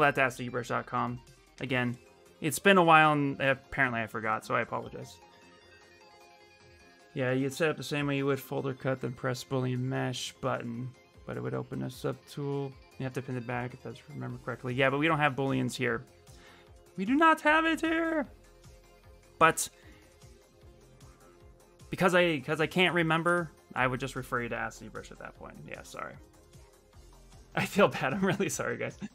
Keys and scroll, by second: 22.6 shift+f.